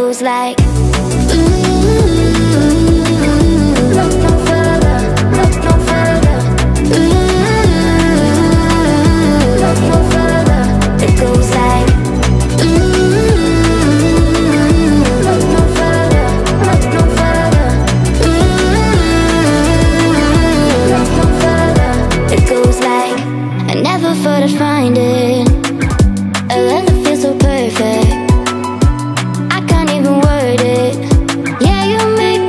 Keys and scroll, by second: 29.9-31.4 typing.